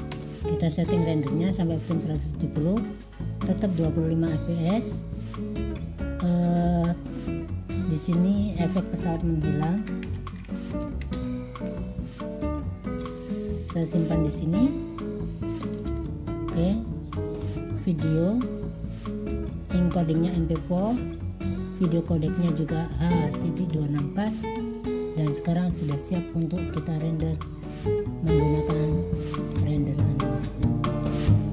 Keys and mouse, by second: 6.8-13.8 drag, 13.9 click, 29.5-31.5 drag.